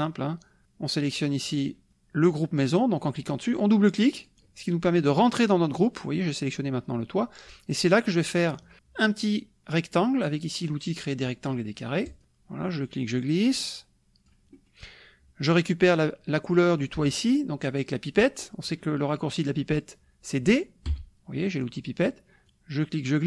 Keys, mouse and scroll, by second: 0.6 click, 4.0 click, 4.5 click, 12.1 click, 12.9-14.5 drag, 14.6 middle click, 14.8 click, 20.9 d, 22.5 click.